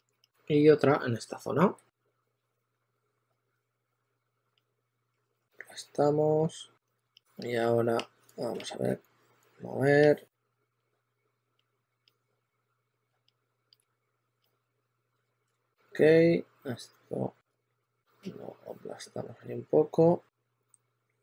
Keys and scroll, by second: 3.0 e, 4.4-9.2 typing, 13.7 s, 14.5 2, 15.4 super+a, 15.6 2.